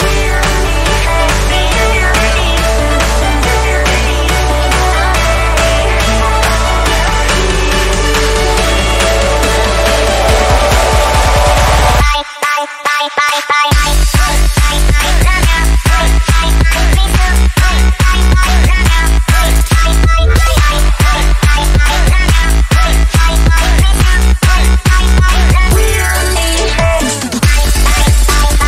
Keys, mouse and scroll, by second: 4.2 b, 5.6 alt+click, 6.9 alt+click, 12.1-20.7 drag, 21.0 space, 21.1 click, 21.2 space, 21.6-26.6 drag, 26.6 ctrl+z, 27.0 click.